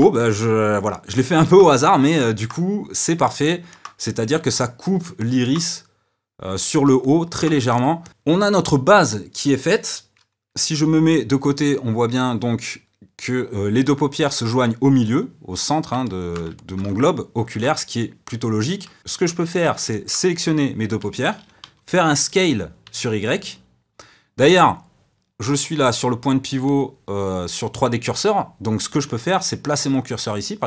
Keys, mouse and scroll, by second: 7.7 click, 8.0-10.4 middle drag, 10.4 KP_3, 16.0-19.0 shift+middle drag, 19.8 shift+click, 21.6 s, 26.5-29.8 drag, 29.9 shift+right click.